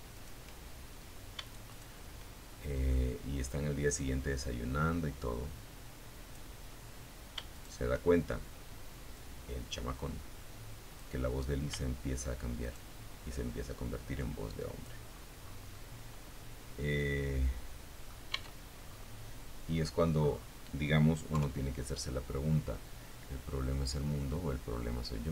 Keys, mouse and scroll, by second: 1.1 click, 2.1-4.7 drag, 5.7 shift+right click, 7.3-9.3 drag, 10.8 shift+right click, 12.3 click, 13.4-13.9 scroll down 1, 13.9-16.4 middle drag, 16.5 Tab, 17.0-17.3 scroll down 2, 17.9-18.2 scroll down 2, 18.3-18.8 scroll up 2, 19.5 KP_3.